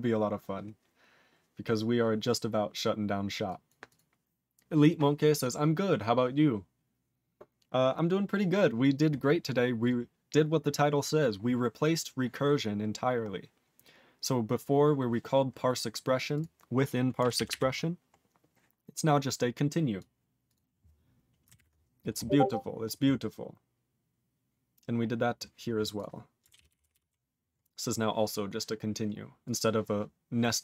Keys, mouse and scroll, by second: 9.8 click, 9.8 click, 13.2 scroll down 2, 14.4 scroll down 3, 15.8 scroll down 3, 16.3 click, 16.4 click, 17.3 ctrl+=, 18.2-18.9 scroll down 3, 18.9 click, 20.0 click, 20.4 click, 20.5 click, 21.5 ctrl+0, 22.1-23.4 scroll up 12, 23.4-25.3 scroll up 12, 25.3 click, 25.6 click, 25.9 click, 26.0 click, 26.5 ctrl+=, 27.6 scroll down 1, 27.8 click, 28.4 click, 28.7-29.2 scroll up 5, 29.4 click, 29.4 click.